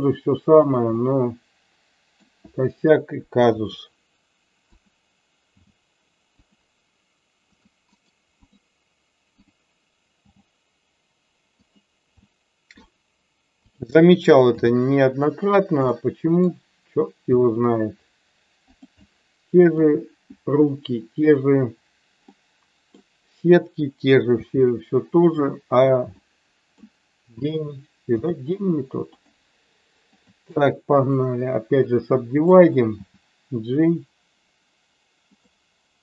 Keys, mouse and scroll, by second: 0.6 click, 1.0-2.3 middle drag, 3.6 r, 5.5 g, 6.3 click, 7.5 click, 8.0 right click, 10.2 g, 12.2 middle click, 13.6 click, 14.5 g, 15.5 click, 15.9 middle click, 17.3 e, 18.7 click, 18.9 middle click, 22.3 middle click, 24.3 g, 26.2 middle click, 28.2 g, 29.1 click, 30.1 click, 30.4 right click, 32.3 click, 33.1 g.